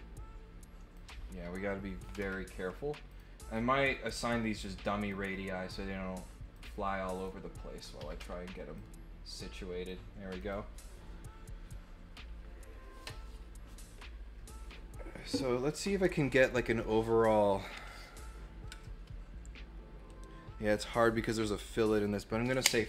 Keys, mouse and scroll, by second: 3.0 click, 3.3 right click, 4.1 click, 5.0 click, 6.5 click, 7.1 click, 8.7-9.8 drag, 10.3 click.